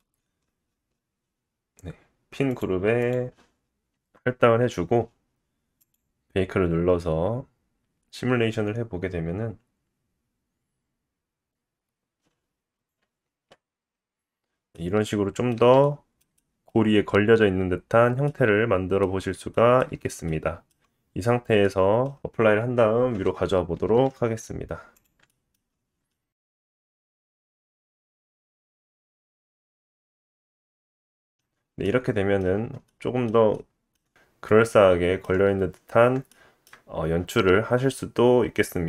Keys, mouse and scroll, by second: 1.1-5.5 drag, 3.9 Tab, 12.8 click, 13.1 space, 13.5-14.7 drag, 14.7 middle click, 15.7 middle click, 16.2 middle click, 16.7-17.7 scroll up 2, 18.2 middle click, 19.6 shift+middle click, 19.9 space, 20.6-22.3 drag, 20.6-21.5 scroll down 5, 20.8 g, 22.3-23.7 middle drag, 23.7-26.9 drag, 25.6 g, 26.9-28.9 shift+middle drag, 27.6-27.9 scroll up 2, 28.9-31.0 right drag, 30.4-31.0 scroll down 2, 31.0-32.5 drag, 31.6 shift+middle click, 32.0 middle click, 32.5 middle click, 32.5 scroll down 2, 32.6-32.9 shift+drag, 32.9-38.8 shift+middle drag, 34.3-34.9 scroll up 1, 36.2 scroll down 2.